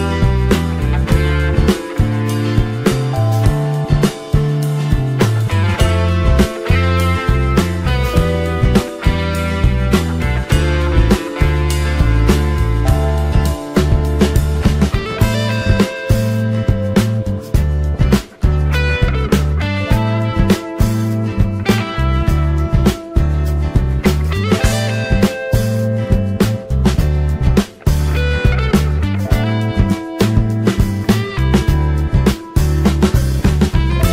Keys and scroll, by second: 11.2 ctrl+t.